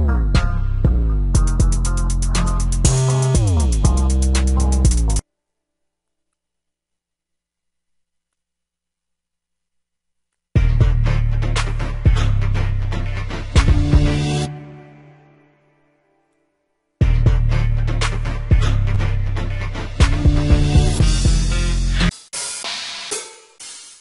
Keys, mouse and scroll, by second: 5.5 m, 5.5 d, 5.7 b, 5.9 d.